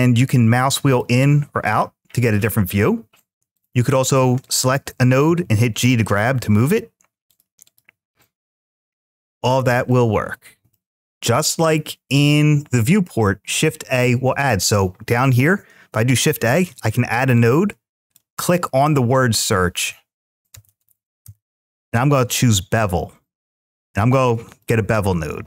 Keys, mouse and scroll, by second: 7.5-8.7 drag, 14.3-14.7 drag.